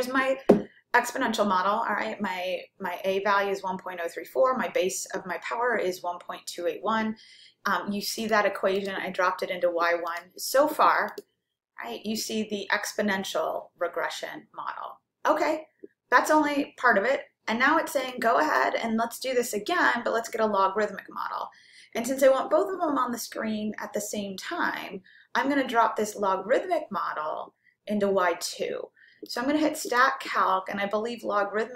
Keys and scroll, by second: 11.1 9, 29.9 Right.